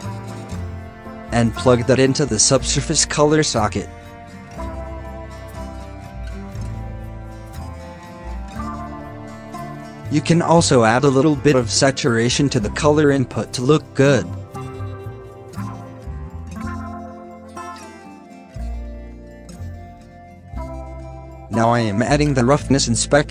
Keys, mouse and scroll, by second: 0.2 scroll down 5, 5.5 middle click, 5.7 scroll up 3, 7.2 shift+middle click, 7.5-8.2 scroll up 1, 8.2-9.2 shift+middle drag, 9.2-9.7 drag, 9.7 shift+d, 11.0-16.7 scroll up 5, 16.7-19.3 scroll down 8, 19.3-19.9 scroll down 2, 22.2 middle click, 22.4 scroll up 3.